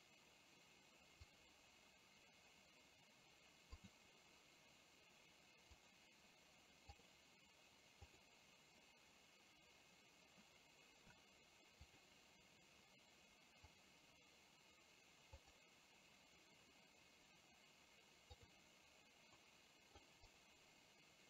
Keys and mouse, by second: 3.8 click, 18.4 click, 19.5-20.1 middle drag, 20.4 click.